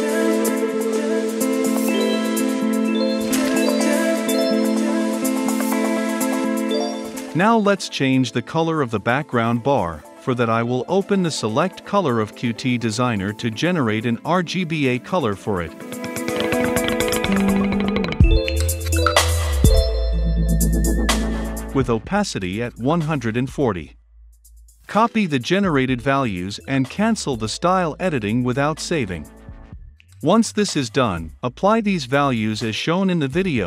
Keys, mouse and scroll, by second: 1.7 click, 2.2 ctrl+F5, 6.9-20.2 drag, 20.3 ctrl+v, 21.3-24.7 drag, 26.3 ctrl+x, 28.0-31.3 drag, 31.3 Return, 31.8-33.6 typing, 32.1 Return.